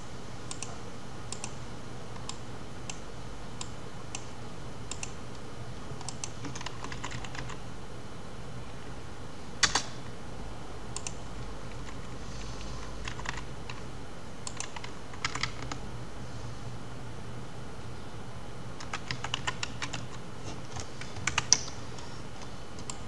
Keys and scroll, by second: 9.3 Return.